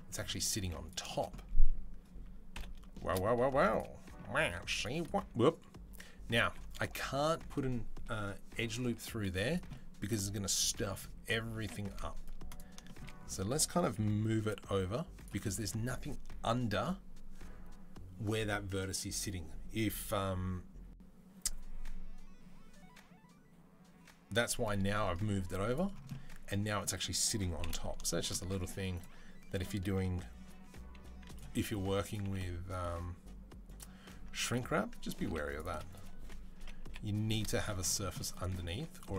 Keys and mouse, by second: 0.4 z, 0.9 shift+click, 2.4 KP_7, 2.7 shift+click, 3.4 2, 3.6-31.3 middle drag, 4.3 ctrl+r, 8.7 z, 11.4 KP_7, 11.8 z, 14.0 g, 25.2 z, 27.4 KP_7, 28.7-30.2 drag, 30.3 e, 31.3 s, 32.0 g, 34.1 1, 34.3 click, 35.0 ctrl+r, 35.7 click, 36.0 1, 36.4 g, 38.5-39.1 middle drag, 38.5 z.